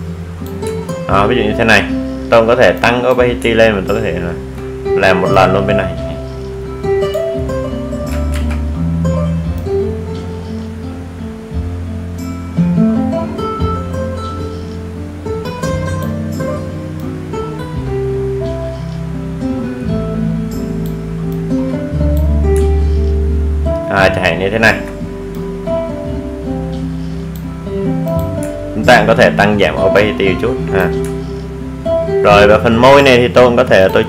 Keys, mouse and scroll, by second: 4.5-5.0 alt+scroll down 1, 6.3 click, 7.2 alt+scroll up 1, 8.9-11.8 drag, 11.8 ctrl+z, 12.9-25.1 drag, 25.1 alt+scroll down 1, 26.9 alt+scroll up 1, 27.6-30.2 drag, 30.9 alt+scroll down 1, 32.0 click, 33.2 alt+scroll down 1.